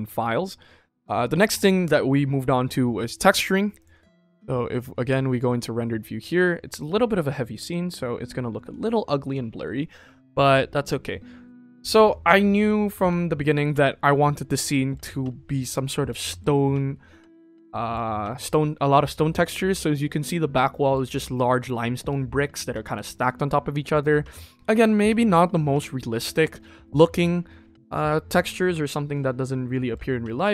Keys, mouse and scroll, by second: 5.0 drag, 6.3 ctrl+s, 6.6 middle click, 6.7 scroll down 2, 7.4 middle drag, 7.7 scroll up 2, 8.7 ctrl+s, 10.3 KP_0.